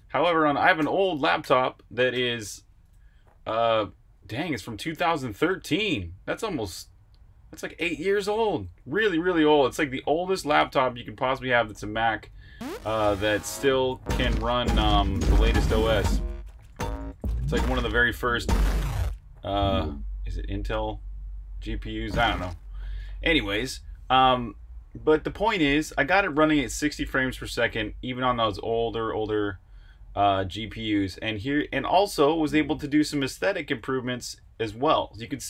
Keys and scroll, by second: 7.8-9.1 typing, 21.4-24.2 typing, 27.9 typing, 29.3-32.3 typing.